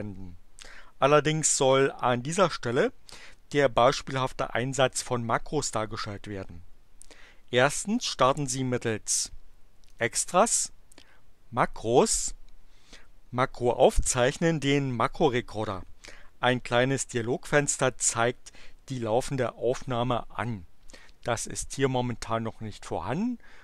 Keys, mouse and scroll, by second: 9.8 click.